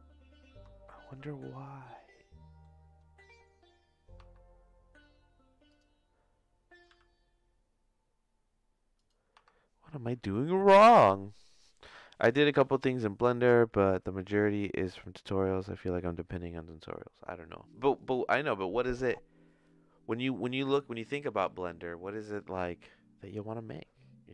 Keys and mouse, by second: 1.0-2.6 shift+middle drag, 4.2 Tab, 5.6 click, 6.8 g, 9.3 Tab, 10.6 middle click.